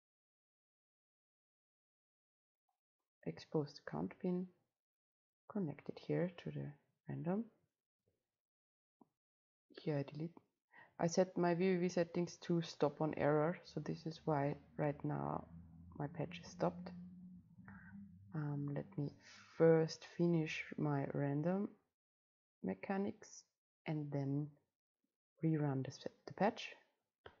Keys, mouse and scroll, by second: 0.1-3.5 drag, 3.5-5.4 middle drag, 5.4-7.1 drag, 9.0 click, 9.1 click, 9.8 Delete, 11.8 click, 19.5 ctrl+c, 19.8 ctrl+v, 21.0-27.4 drag.